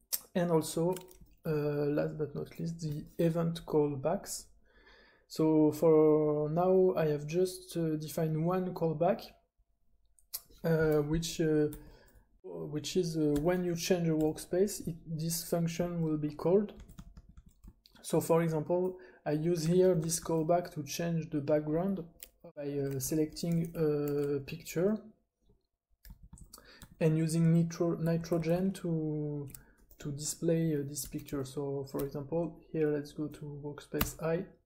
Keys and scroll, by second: 0.0-2.9 typing, 11.7 j, 13.3 j, 14.2 j, 16.5-18.3 typing, 19.6-20.1 typing, 22.2-24.8 typing, 26.0-29.2 typing, 34.1 super+i.